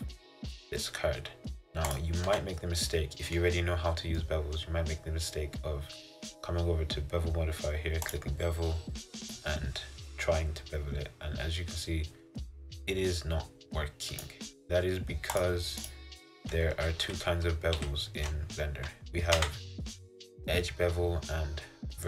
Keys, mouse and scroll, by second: 2.0 click, 2.4 Tab, 3.0 middle click, 3.7-4.2 scroll down 2, 4.2 scroll up 1, 4.3-6.4 middle drag, 8.2-9.6 drag, 15.4-17.1 drag, 17.1 ctrl+z, 17.9 ctrl+z, 19.5 Tab.